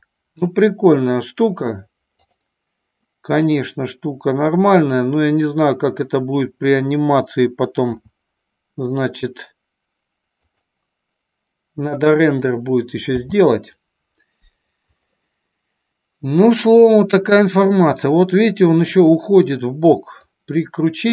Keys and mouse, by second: 2.2 click, 3.5 click, 4.9 click, 8.1 s, 10.6 click, 13.2 n, 15.2-17.1 middle drag, 19.1-19.6 middle drag, 20.3-21.1 drag.